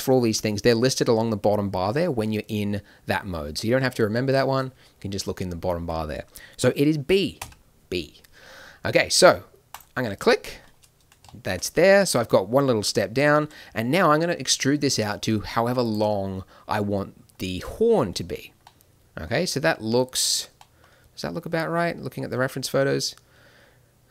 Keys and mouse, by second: 13.4 e.